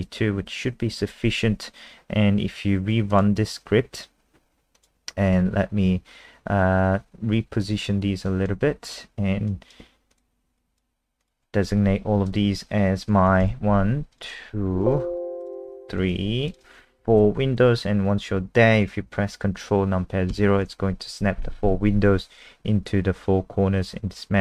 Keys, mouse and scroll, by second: 3.1 click, 8.3 click, 13.4 super+KP_1, 14.1 click, 14.7 super+KP_2, 15.4 click, 16.0 super+KP_3, 16.5 click, 17.2 super+KP_4, 20.3 ctrl+KP_0.